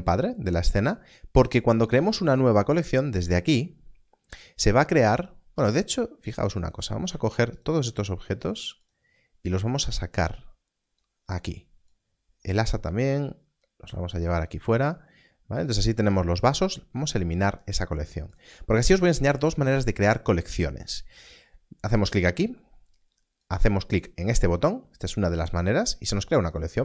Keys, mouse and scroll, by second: 0.0 click, 6.4 click, 7.5 shift+click, 8.4 shift+click, 16.8 click, 23.4 click.